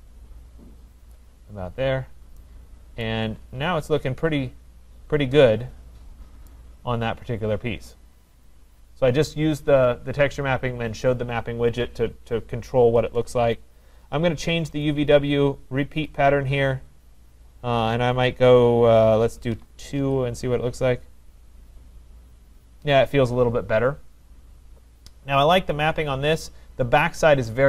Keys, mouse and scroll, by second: 1.1 click, 1.7-2.0 scroll, 3.3 right click, 3.6-4.2 scroll, 4.2-6.2 scroll, 6.5 right click, 14.8 click, 16.2 click, 19.5 2, 20.0 Return, 20.5 Return, 20.5 click, 26.0-27.6 scroll down 4.